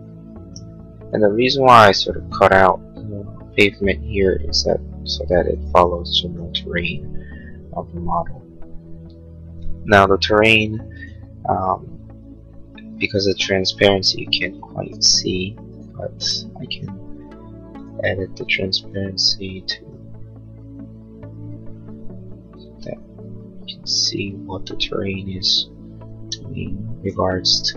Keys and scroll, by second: 14.8 p.